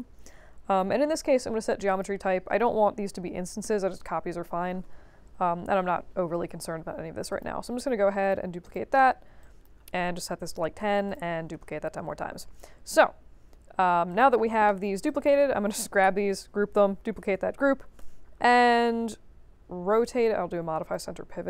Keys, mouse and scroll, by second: 1.8 click, 7.3 click, 8.2 click, 8.6 click, 9.4 click, 9.8-10.6 typing, 11.0 click, 14.0 click, 15.0 click, 16.0 ctrl+g, 16.7 ctrl+d, 17.9 e, 20.8 click.